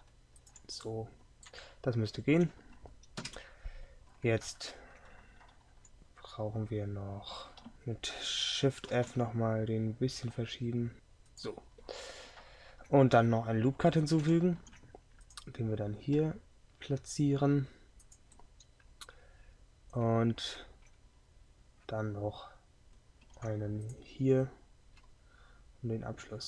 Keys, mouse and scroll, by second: 3.3 KP_7, 7.7 KP_Decimal, 9.0 shift+v, 14.7 ctrl+r, 23.3 ctrl+r.